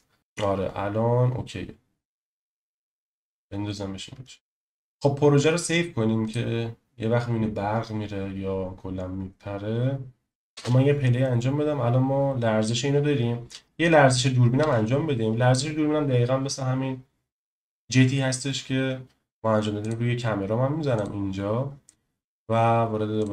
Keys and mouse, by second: 0.2 KP_0, 6.2-10.3 drag, 10.5 space, 14.6 space.